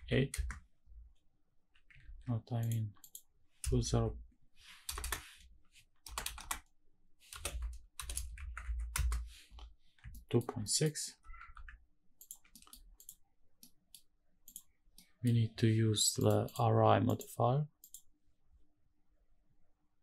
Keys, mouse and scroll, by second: 1.8 ctrl+z, 2.3-8.6 drag, 4.7 BackSpace, 5.9 BackSpace, 9.8 shift+middle click, 10.3 middle click, 10.8 g, 11.1 x, 11.9 ctrl+click, 12.2 middle drag, 12.2 scroll down 1, 12.6 click, 13.3 middle click, 14.1 click, 14.6 middle drag, 15.9 click, 16.1 click, 16.7 click, 19.8 click.